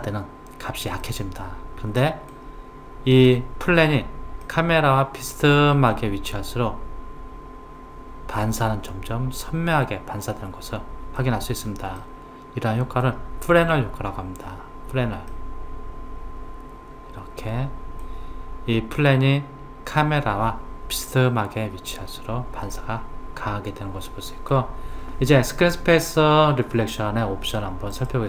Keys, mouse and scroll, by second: 1.1-4.1 middle drag, 4.5-7.5 middle drag, 12.0-15.0 middle drag, 15.3-18.3 middle drag, 22.7-25.7 middle drag, 27.9 click.